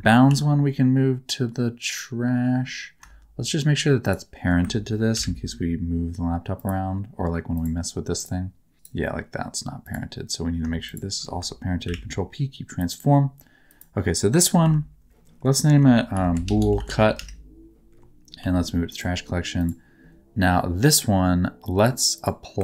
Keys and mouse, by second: 0.2 m, 4.0 shift+click, 5.1 ctrl+p, 7.5 click, 8.1 click, 8.7 r, 10.8 click, 12.1 ctrl+p, 14.6 m, 15.7 F2, 16.4 o, 18.4 m, 19.6 right click, 21.8 right click, 22.1 right click.